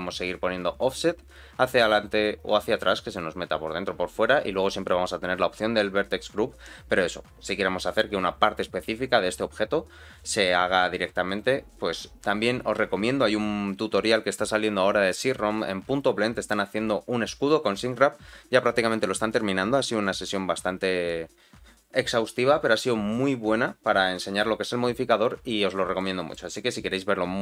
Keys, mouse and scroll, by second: 26.0 middle click.